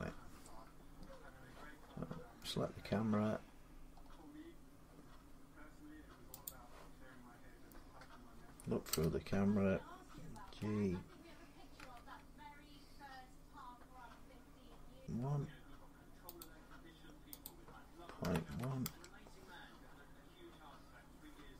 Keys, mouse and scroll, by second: 2.1-2.7 scroll down 5, 2.7-3.3 scroll up 6, 3.4 scroll up 2, 3.7-4.4 scroll down 1, 4.4 scroll down 1, 4.5-5.2 scroll, 5.2-6.1 scroll, 6.3 click, 8.7 0, 9.5 middle click, 10.4 g, 11.6 x, 14.8 click, 14.8 typing, 16.3 click, 17.3 Return, 17.3 click, 18.3 1, 18.7 Return.